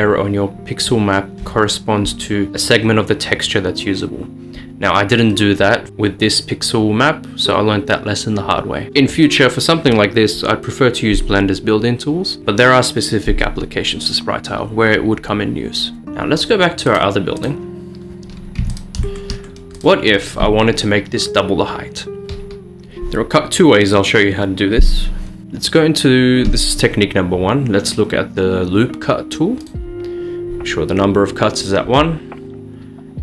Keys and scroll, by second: 16.0 Return, 16.0 typing, 18.1-18.8 typing, 25.4 Tab.